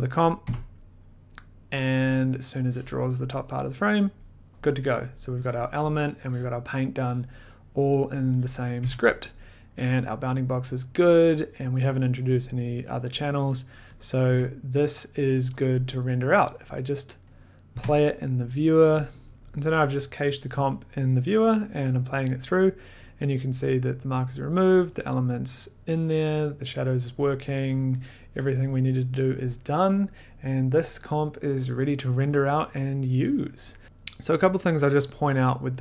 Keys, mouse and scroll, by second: 0.3 click, 0.4 f, 3.2 click, 5.8 click, 6.5 click, 8.4 click, 8.8 1, 9.6 middle click, 11.5 scroll, 12.0-13.0 scroll, 13.2-13.5 scroll, 14.1 click, 14.2 1, 16.6 click.